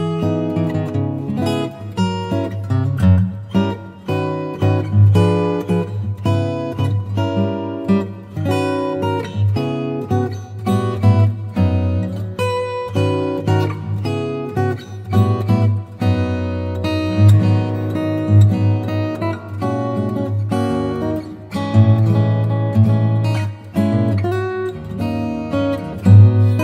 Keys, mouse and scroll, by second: 2.9-4.7 typing, 7.1 s, 7.1 click, 10.6 click, 13.9 click, 14.1 click.